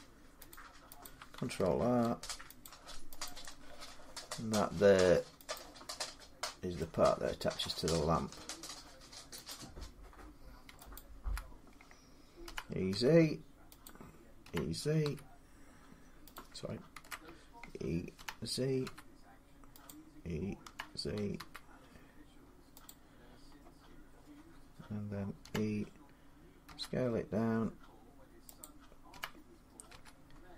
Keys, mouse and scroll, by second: 0.3 click, 1.2 click, 1.8 ctrl+r, 2.5 click, 3.1 click, 5.4 click, 7.5 middle click, 8.1 scroll, 9.3 click, 10.7 scroll, 10.8 alt+click, 12.3-12.7 typing, 14.2-14.8 typing, 16.2 click, 16.8 ctrl+z, 18.0-18.6 typing, 19.7 click, 20.5-21.2 typing, 22.7 click, 23.6 scroll, 25.2 typing, 26.5 middle click, 26.5 e, 26.5 s, 28.4 click, 29.0-29.7 typing.